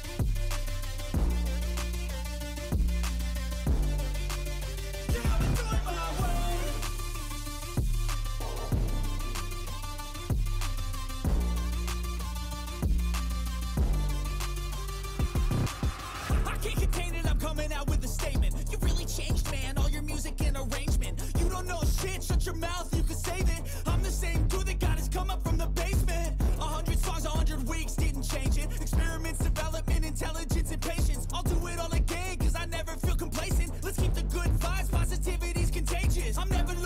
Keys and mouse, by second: 0.2 right click, 1.3 right click, 2.6 right click, 3.0 right click, 3.7 right click, 4.1 right click, 18.6 right click, 23.1 right click, 30.8 right click, 32.1 right click, 35.3 right click.